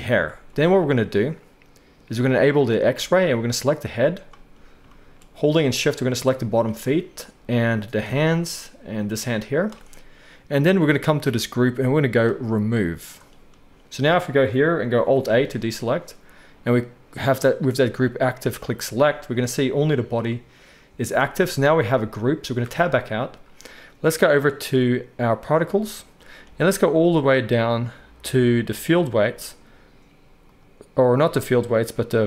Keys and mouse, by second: 15.1 alt+a, 22.8 Tab, 25.3-28.9 middle drag, 28.9-32.2 drag.